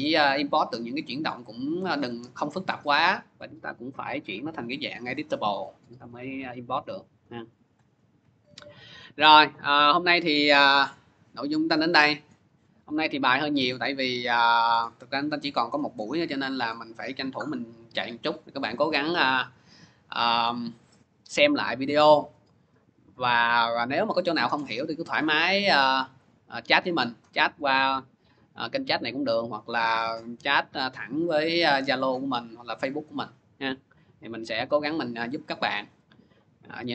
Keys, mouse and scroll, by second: 5.4 click, 7.0 click, 9.4 click, 18.7 click, 23.7 click.